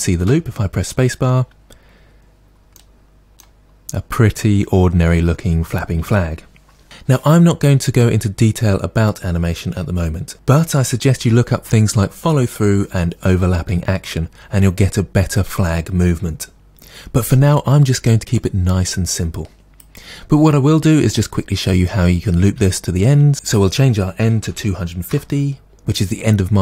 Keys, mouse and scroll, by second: 0.2 space, 19.6-26.6 drag, 25.2 Return, 26.1-26.4 scroll down 2.